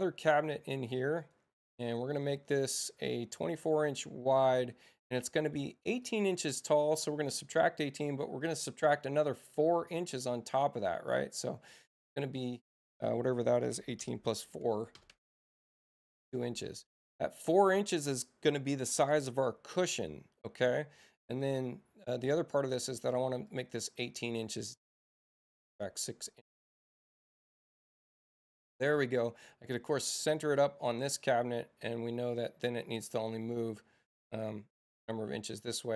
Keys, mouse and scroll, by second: 1.2 right click, 2.6 click, 4.4 click, 6.0-8.5 middle drag, 8.5-12.5 drag, 12.2 Return, 15.1 Tab, 16.4 click, 23.5 click, 24.2 Return, 28.6 click, 29.5 i, 32.4-35.5 drag, 35.2 Return.